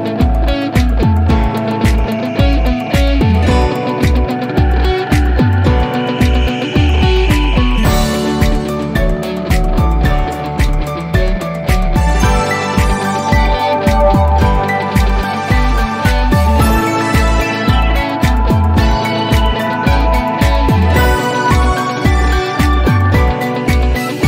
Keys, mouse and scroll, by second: 23.7 click.